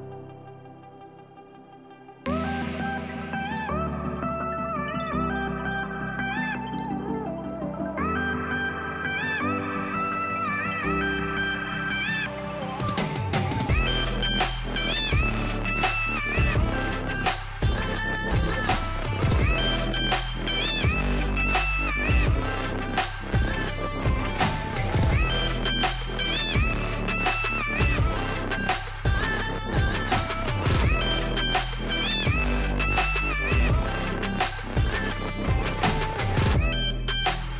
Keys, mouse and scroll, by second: 5.5-9.1 drag, 9.1 ctrl+z, 9.9 click, 11.7 click, 12.8 Delete, 13.7-17.8 drag, 18.0-22.4 drag, 23.3-30.3 drag, 30.4-32.2 drag, 32.2 ctrl+z, 33.3 click, 34.7 click, 37.3-37.5 drag.